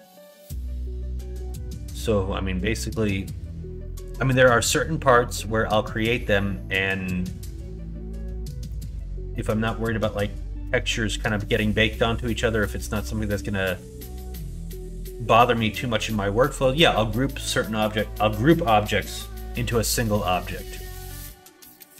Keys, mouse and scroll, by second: 0.8 middle click, 1.5 middle click, 5.1 middle click, 8.7 middle click, 12.9 middle click, 13.8 middle click, 16.4 middle click, 20.2 middle click, 21.1 middle click, 21.7 middle click.